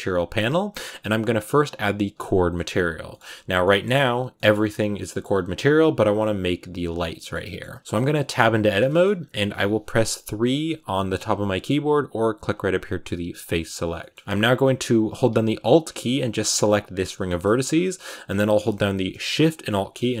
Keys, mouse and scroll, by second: 2.1 click, 2.4 shift+middle click, 3.2 z, 3.5-4.8 middle drag, 4.8-5.4 scroll up 2, 5.0 middle click, 5.4-7.0 scroll down 2, 7.0-8.2 middle drag, 8.2 Tab, 8.7 shift+middle click, 9.0-10.1 scroll up 1, 10.1 scroll up 1, 10.2 3, 13.3 click, 13.8 shift+middle click, 14.2 scroll up 1, 16.3 alt+right click, 17.1 shift+middle click, 17.3-17.6 scroll up 3, 20.1 alt+shift+right click.